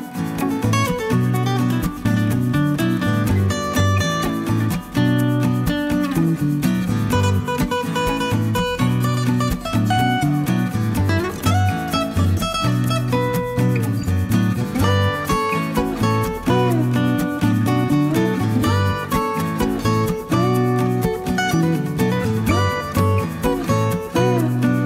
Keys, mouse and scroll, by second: 1.5 click, 3.1-4.5 middle drag, 5.0-6.7 drag, 6.8 scroll down 1, 7.2-7.5 scroll up 1, 9.5 click, 11.1 5, 12.3 click, 15.3 click, 17.5 click, 18.3-18.6 scroll down 1, 18.6 scroll up 1, 18.7-19.8 middle drag, 19.9-20.3 scroll down 1, 20.5-23.1 middle drag, 23.5-24.2 scroll up 1, 24.2-24.8 middle drag.